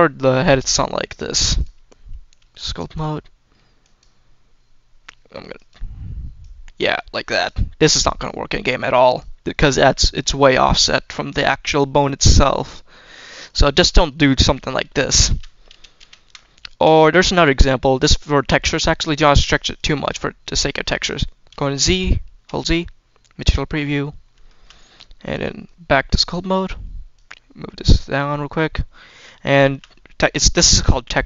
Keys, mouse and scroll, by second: 1.4-2.9 drag, 1.4-2.6 scroll down 1, 3.7 click, 5.4 click, 6.3-7.4 drag, 7.5-8.1 scroll up 2, 8.1 click, 8.8 click, 9.4 scroll down 1, 10.5-11.4 scroll up 3, 11.4-12.4 middle drag, 13.3 click, 13.9-14.4 scroll down 1, 14.4 scroll down 2, 14.6 shift+middle click, 15.2 ctrl+z, 15.6 ctrl+z, 16.0 ctrl+z, 16.3-16.6 scroll up 2, 19.3-19.7 drag, 21.4 z, 24.3 shift+middle drag, 25.2-26.2 drag, 27.0-28.0 drag, 29.1 scroll down 1, 29.4 shift+middle click.